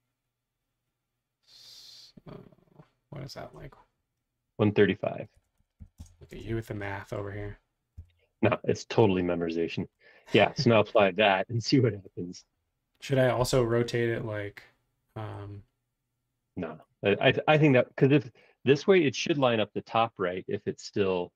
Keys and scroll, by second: 5.1-6.3 typing, 7.9 m, 13.4 q, 17.2 Escape, 17.6 space.